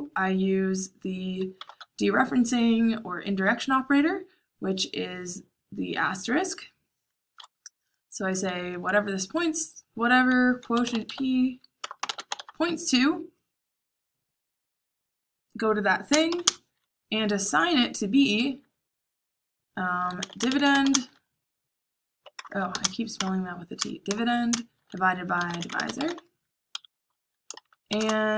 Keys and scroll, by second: 1.5 shift+8, 10.3-12.8 typing, 16.0-16.4 typing, 19.7-26.5 typing, 26.6 Escape, 27.5-28.3 typing.